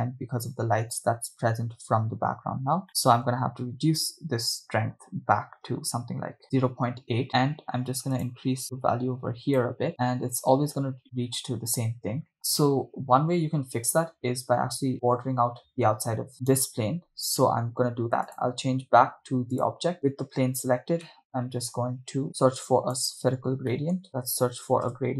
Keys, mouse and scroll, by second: 2.9-6.4 drag, 2.9 middle click, 8.2 click, 9.9-10.2 scroll down 5, 11.5 scroll up 1, 12.2 scroll up 1, 12.8 right click, 16.7 drag, 16.7 right click, 17.5-18.3 scroll down 3, 18.3-19.8 drag, 20.1 right click, 20.8-21.2 scroll down 3, 21.2 middle click, 22.8 click, 23.3 scroll up 2, 23.7 middle click, 24.1 shift+a.